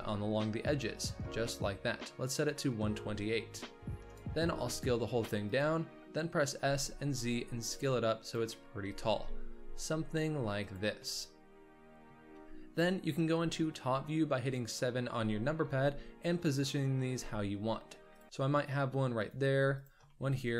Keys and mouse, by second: 1.4-2.1 middle drag, 3.9 middle click, 4.0 s, 4.4 s, 6.5 s, 9.0 g, 11.1-12.1 drag, 14.3 KP_7, 15.6 g, 17.0 shift+d, 19.4 g, 20.0-20.4 shift+drag.